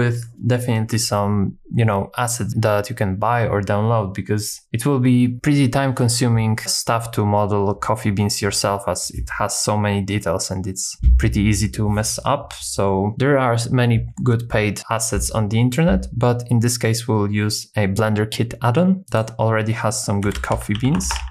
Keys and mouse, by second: 19.3-21.3 drag, 20.5 o, 21.1 BackSpace.